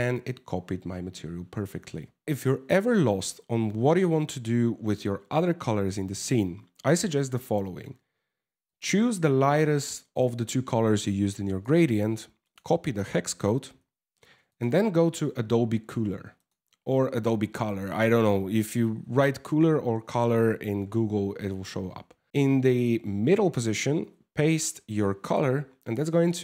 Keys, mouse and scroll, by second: 1.6 middle click, 8.3 click, 11.2 click.